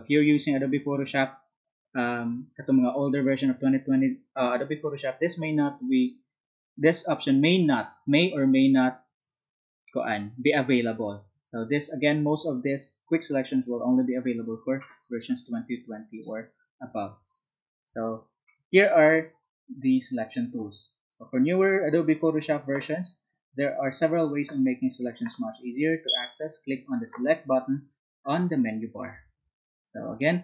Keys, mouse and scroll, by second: 14.4 Down.